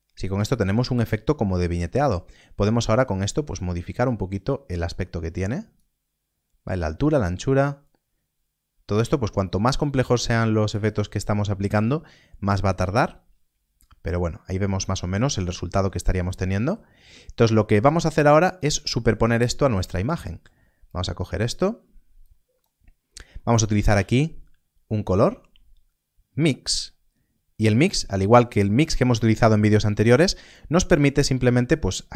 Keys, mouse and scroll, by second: 2.6 click, 7.8 click, 15.4 click, 15.7 scroll down 1, 16.2 middle click, 17.0 scroll up 1, 18.2 click, 18.9 middle click, 19.2-19.6 scroll down 1, 19.9 click, 22.9-23.3 scroll up 1, 23.3 middle click, 26.6 click.